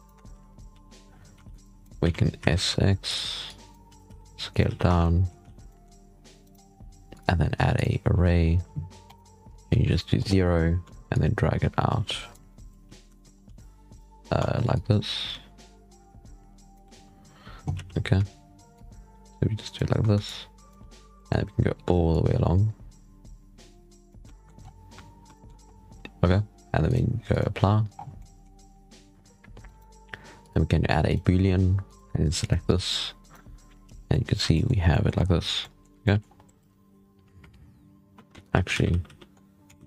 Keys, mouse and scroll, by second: 0.0 Tab, 0.2 z, 0.6 a, 1.0-1.3 scroll up 1, 1.3 alt+a, 1.5 click, 1.9 s, 3.3 click, 3.8 s, 4.6 z, 4.8 Tab, 4.9-5.3 middle drag, 5.3 alt+a, 5.4 scroll down 4, 5.6 middle drag, 5.8 scroll up 3, 6.3 right click, 7.0 click, 7.7-13.1 drag, 13.1 shift+middle click, 13.1 scroll up 2, 13.3 g, 14.6-17.6 shift+drag, 17.6 z, 19.1-20.7 shift+drag, 20.7-21.1 scroll down 1, 21.1-23.1 shift+middle drag, 23.1-25.1 shift+drag, 25.1-26.4 scroll up 1, 26.4-27.1 scroll up 1, 27.1 click, 27.8 scroll down 1, 28.0-28.7 middle drag, 28.7-29.1 scroll down 3, 29.5 right click, 30.3 click, 31.0-31.8 drag, 33.1 right click, 35.1 scroll up 1, 35.3 scroll down 4, 35.5-36.1 middle drag, 36.1 scroll up 2, 36.8-39.1 scroll up 2, 39.1 ctrl+z, 39.3-39.6 scroll down 3, 39.6 ctrl+z.